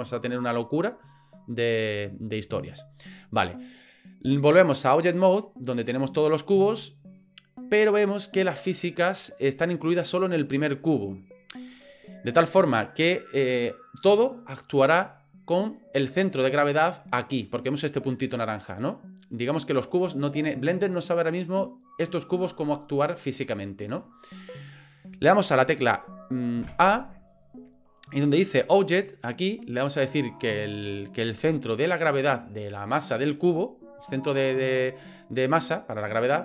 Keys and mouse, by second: 4.2-5.0 drag, 5.5-7.2 middle drag, 7.6-8.3 middle drag, 9.1-9.7 middle drag, 16.4 middle drag, 17.6 middle click, 19.3 middle drag, 24.2-24.9 middle drag, 26.6 a, 29.1-36.4 drag.